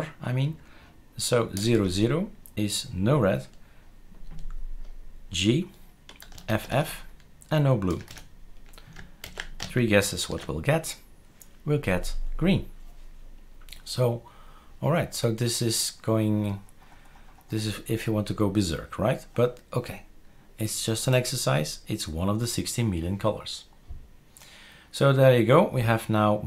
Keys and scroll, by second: 1.5 typing, 6.5 typing, 7.9 typing, 9.2 ctrl+s, 10.2 shift+super+r.